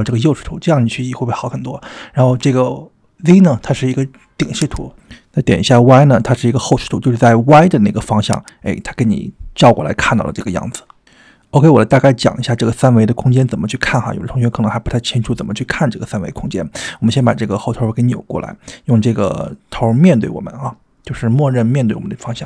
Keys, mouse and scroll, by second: 4.8 click, 5.8 g, 8.3 click, 9.5 g, 17.6-19.9 middle drag, 20.7-21.8 middle drag.